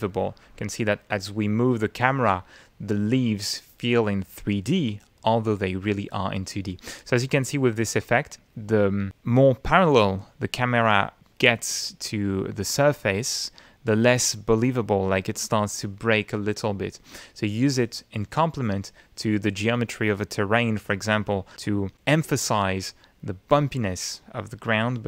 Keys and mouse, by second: 0.4 middle click, 1.1 middle click, 2.0 middle click, 3.0-5.3 middle drag, 5.6-7.3 middle drag, 8.3 middle click, 9.1-10.2 middle drag, 10.5 middle click, 16.5 middle click, 18.9-20.8 middle drag.